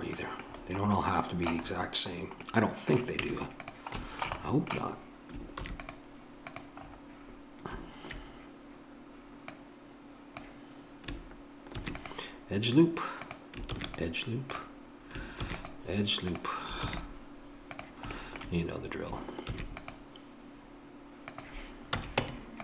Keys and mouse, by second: 3.2 Tab, 3.7 Tab, 5.6 ctrl+r, 9.5-11.7 drag, 11.7 ctrl+r, 15.4 ctrl+r, 18.1-21.2 drag, 19.4 ctrl+r, 22.0 a, 22.2 Tab.